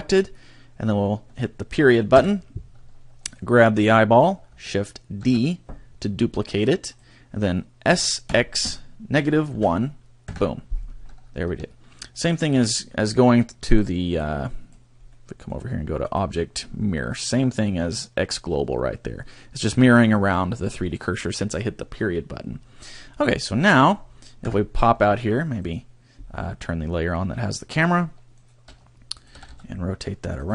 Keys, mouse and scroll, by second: 2.1 ., 3.3 right click, 5.3 shift+d, 6.9 click, 7.9 s, 11.5 a, 13.7 click, 14.2 click, 15.1 middle click, 16.0 click, 23.0 scroll down 2, 23.3 middle click, 24.4 KP_0, 25.7 right click, 27.5 shift+click, 28.3 right click, 28.7 right click, 29.2 click.